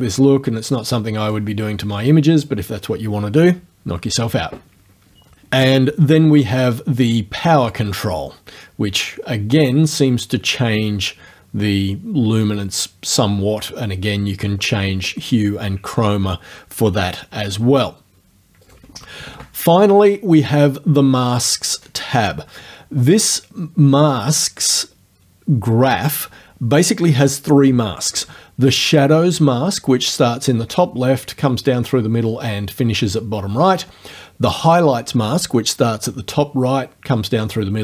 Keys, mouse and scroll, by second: 0.7 click, 2.0 click, 7.7-13.3 drag, 18.7 right click, 19.2 KP_0, 19.3 Return, 21.3 click.